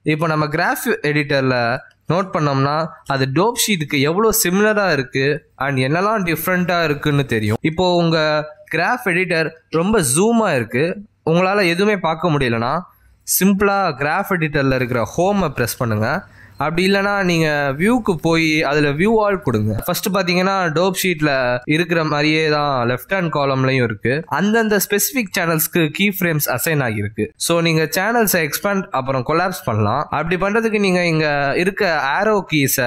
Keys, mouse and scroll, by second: 0.9 space, 1.8 click, 3.4 space, 8.4 click, 14.7-15.1 scroll up 4, 15.1 middle click, 15.8 scroll up 3, 16.5 middle click, 16.5 scroll up 1, 17.5 Home, 17.9 click, 29.9 click, 31.4 click, 32.6 click.